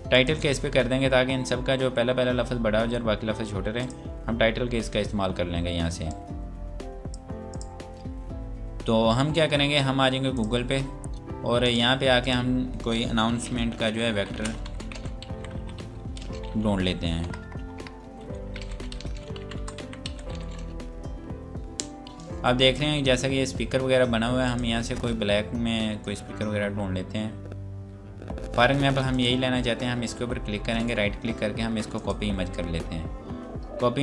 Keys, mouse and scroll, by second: 3.7 click, 10.3 click, 13.6-17.3 typing, 18.4-20.8 typing, 24.5 click, 27.1 scroll down 1, 27.9 scroll down 1, 28.0 scroll up 1, 29.1 click, 30.8 right click, 31.8 click, 32.5 scroll down 1.